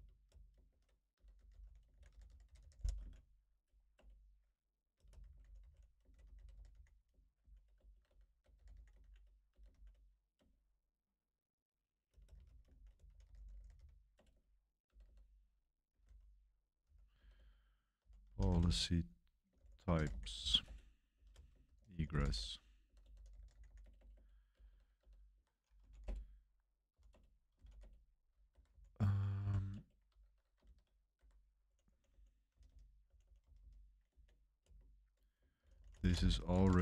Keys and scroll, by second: 0.4-2.9 typing, 3.9 Return, 4.9-9.7 typing, 10.3 Return, 12.0-29.4 typing, 25.3 Home, 27.0 Return, 28.5 Escape, 29.7 Return, 30.6-36.8 typing, 31.1 Escape.